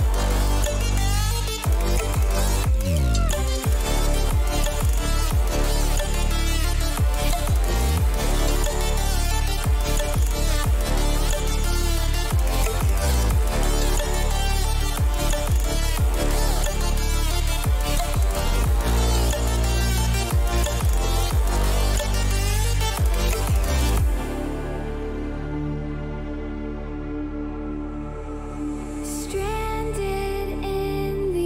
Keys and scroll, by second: 7.1 t, 9.5 r, 11.6 ctrl+a, 19.7 0, 27.7 r, 29.2 BackSpace.